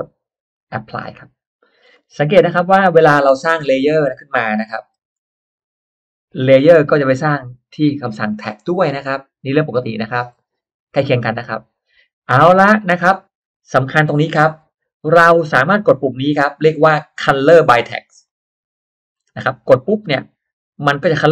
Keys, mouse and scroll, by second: 0.5 click, 1.4 scroll down 1, 1.9-2.2 scroll up 1, 2.2-2.6 scroll down 1, 3.0 scroll up 1, 3.4-4.2 scroll down 2, 3.6 middle click, 5.0 shift+x, 5.5-6.5 shift+drag, 6.7-8.2 shift+drag, 8.4-10.2 shift+drag, 10.4 shift+right click, 11.6 click, 12.0-12.5 scroll down 1, 12.2 middle click, 12.8 scroll up 1, 18.2 click.